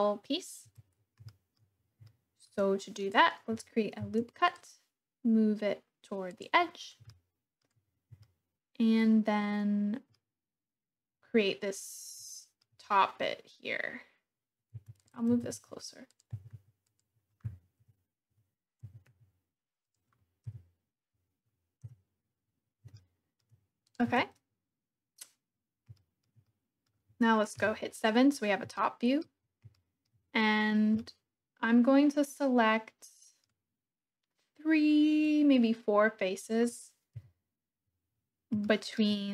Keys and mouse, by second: 0.7 Tab, 1.2 shift+click, 2.1 shift+click, 4.0 ctrl+r, 6.3 click, 7.1 shift+click, 8.3-10.2 shift+drag, 12.3 shift+click, 14.8 Tab, 15.0 click, 15.3 g, 15.6 x, 16.1 click, 16.4 g, 16.6 z, 16.9 click, 17.8 KP_3, 18.8 g, 19.1 y, 19.9 click, 20.4 KP_1, 21.8 KP_1, 22.9-23.4 shift+drag, 23.8 middle click, 24.2 Tab, 25.9 shift+click, 26.4 click, 27.5 KP_7, 28.7 shift+click, 29.7 shift+click, 30.6 middle click, 31.0-32.0 middle drag, 32.0-33.5 drag, 35.4-37.2 middle drag, 37.2 KP_7, 37.9 middle click, 38.5 shift+middle click.